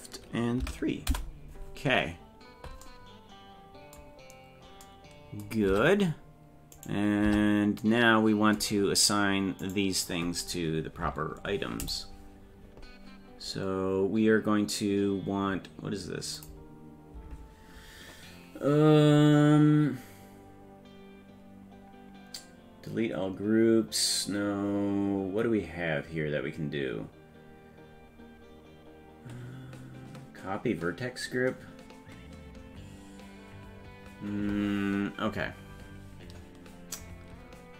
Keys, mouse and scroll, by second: 5.7 Tab, 6.8 right click, 7.3 Tab, 8.8 scroll up 3, 9.6 right click, 11.8 click, 16.4-34.0 drag.